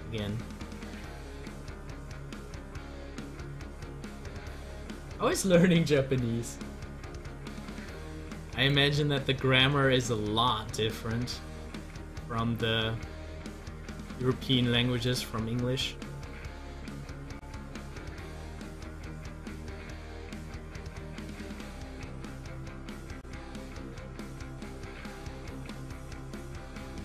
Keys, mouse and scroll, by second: 2.9 scroll up 1, 4.5-9.0 drag, 9.0 scroll down 1, 9.8 middle click, 10.4 scroll up 1, 14.4 Delete, 15.0-21.2 drag, 21.2 scroll down 1, 23.2-26.7 middle drag.